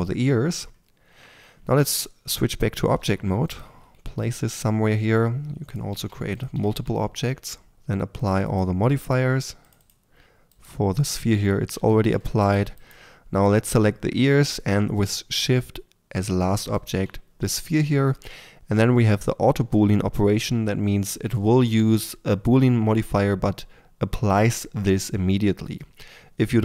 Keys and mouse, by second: 1.1 Tab, 2.9 r, 3.6 g, 5.9 shift+d, 6.5 r, 7.7 r, 7.7 g, 9.0-9.7 right drag, 11.7-18.5 drag.